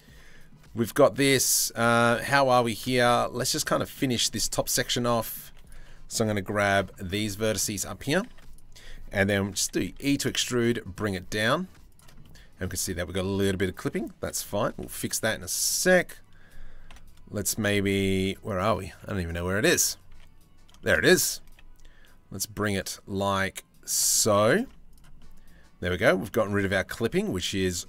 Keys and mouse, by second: 0.2 Tab, 0.4-2.2 drag, 2.5 shift+middle click, 3.1 Tab, 3.2 middle click, 3.8 middle click, 4.1 z, 4.8 middle click, 5.1 1, 6.3 c, 7.9 z, 9.2 e, 11.8 click, 12.8 click, 14.4 z, 15.2 2, 15.4 click, 16.5 KP_7, 17.7 z, 18.9 z, 19.7 1, 20.4 shift+middle click, 21.0 g, 23.7 click, 24.2 z, 24.8 middle click, 25.9 shift+middle click, 26.8 middle click.